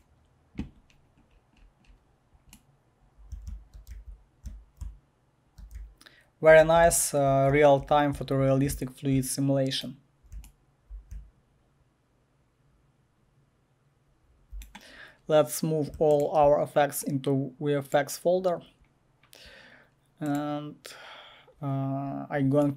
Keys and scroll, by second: 3.1-8.7 typing, 10.1-14.3 typing.